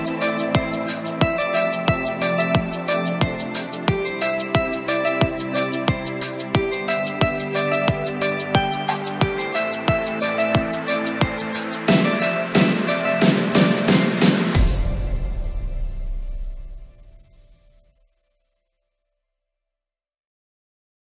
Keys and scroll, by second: 0.3 ctrl+alt+shift+e.